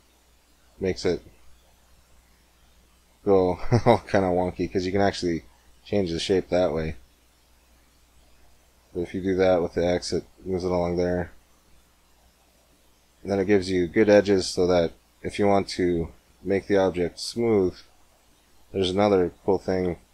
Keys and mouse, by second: 12.0-14.7 middle drag, 14.7 Tab, 14.7-16.0 drag, 17.2-19.8 drag, 19.8-20.1 middle drag.